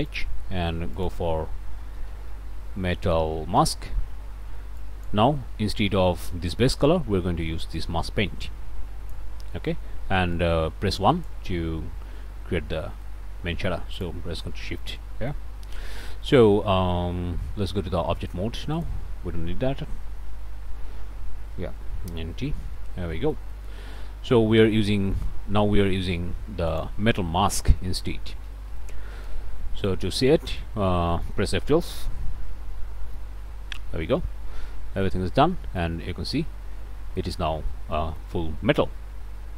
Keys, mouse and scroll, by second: 0.1 click, 1.9 m, 2.1 e, 2.3 t, 3.6 Return, 4.8 click, 7.8-13.2 drag, 13.9 ctrl+shift+click, 15.0 middle click, 15.5-15.8 scroll up 1, 15.9 shift+middle click, 18.2 middle click, 18.8 middle click, 21.5 n, 22.5 t, 23.2 shift+click, 24.8 click, 26.7 click, 27.6 v, 28.7 Down, 29.2 Return, 30.3 scroll up 1, 30.3 middle click, 30.8 scroll down 1, 31.0 click, 31.0 middle click, 31.2 click, 32.2 F12, 34.8 scroll up 1, 35.6 shift+middle click, 36.7 shift+scroll up 1, 37.2 shift+middle click, 37.6 shift+scroll up 1, 37.9 middle click.